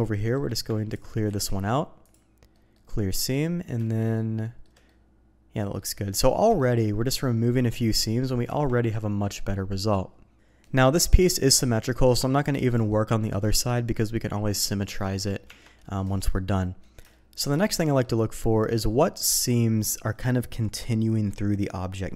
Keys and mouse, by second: 0.0 shift+middle click, 0.9 ctrl+click, 1.2 ctrl+e, 2.5 middle click, 3.1 middle click, 3.3 click, 3.8 shift+click, 4.4 shift+middle click, 4.9 middle click, 6.6 shift+middle click, 8.4 Tab, 9.4 middle click, 10.6 middle click, 11.1-12.9 middle drag, 14.5-14.9 middle drag, 15.4 Tab, 15.7 middle click, 16.6 middle click, 17.1 shift+middle click, 17.7 middle click.